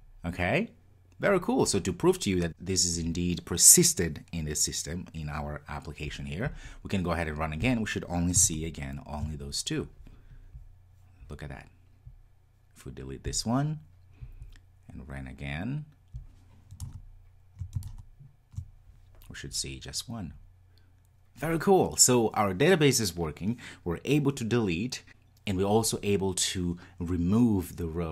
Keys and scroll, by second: 7.6 ctrl+r, 16.2 ctrl+r, 16.8 Tab.